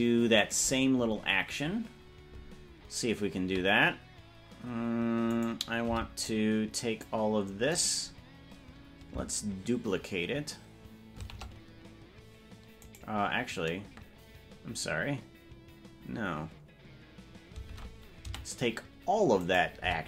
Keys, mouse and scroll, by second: 0.7 right click, 5.5 right click, 5.9 c, 11.3 shift+d, 17.9 ctrl+Tab, 18.3 a, 19.5 right click, 19.9 c.